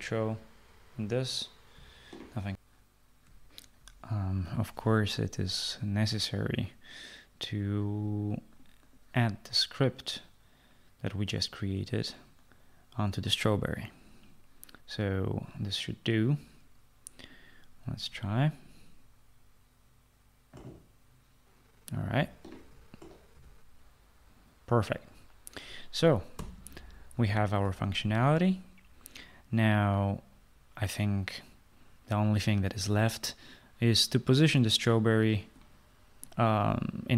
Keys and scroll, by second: 0.9 typing, 22.5-23.3 typing, 26.2 Escape.